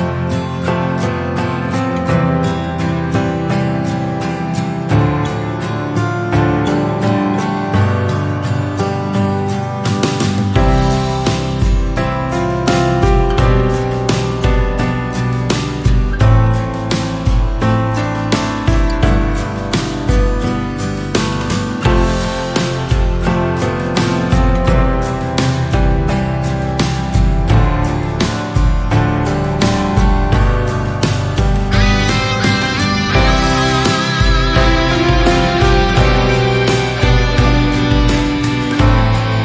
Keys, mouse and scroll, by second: 3.4 KP_Decimal, 3.8 scroll down 2, 3.9-4.7 middle drag, 4.7-5.0 scroll up 2, 5.0-5.5 shift+middle drag, 5.5 Tab, 7.1-8.4 middle drag, 8.4 click, 9.0 2, 9.2 click, 9.9 s, 12.4-14.4 shift+middle drag, 14.9 Tab, 15.4 Tab, 16.1 ctrl+r, 17.6 1, 17.8 click, 18.3 click, 20.4 middle click, 20.9-21.5 scroll up 2, 21.5-23.7 shift+middle drag, 23.7 Tab, 24.1 middle click, 24.4 Tab, 24.9 a, 25.2 a, 26.2 r, 26.9 e, 29.8-30.9 middle drag, 30.9 ctrl+r, 32.9 scroll down 1, 33.1-34.2 middle drag, 34.2 KP_7, 34.7 scroll up 1, 35.0-36.1 shift+middle drag, 36.1 click, 37.3 alt+click, 39.0 s.